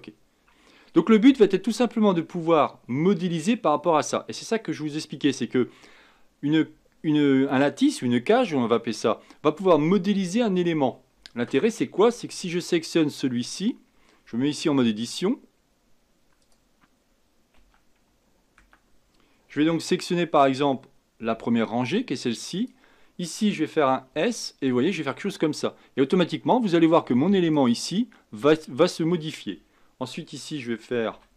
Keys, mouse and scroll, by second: 13.4 click, 16.4 click, 17.6 Tab, 21.2 b, 24.1 s, 31.1 a.